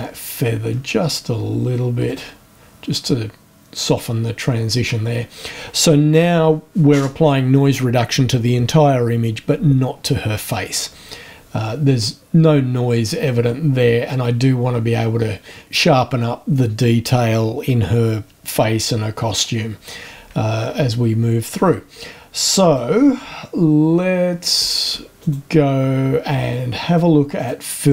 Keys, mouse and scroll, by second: 0.0 shift+scroll up 1, 0.3 shift+scroll down 1, 0.4 shift+scroll up 1, 0.6-1.2 shift+scroll down 1, 2.0 click, 3.8 click, 13.8 scroll up 1, 14.6-15.3 scroll up 1, 19.4-19.8 scroll down 1, 23.0-24.0 scroll up 1, 25.2 click, 27.4 click.